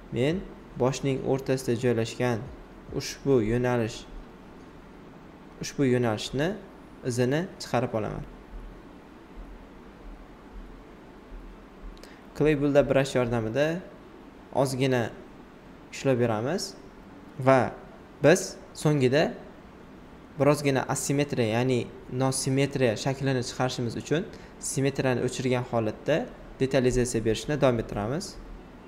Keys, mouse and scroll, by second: 4.4 shift+click, 5.6-8.7 right drag, 9.6 alt+click, 11.7-13.4 shift+drag, 13.4 shift+d, 14.6 shift+click, 15.7 shift+right click, 17.2 alt+click, 18.2 typing, 20.0 typing, 20.2 alt+right click, 22.5 alt+right click, 24.6 space, 24.8 click, 25.4-26.9 shift+drag, 26.9 alt+shift+right click, 28.4 x.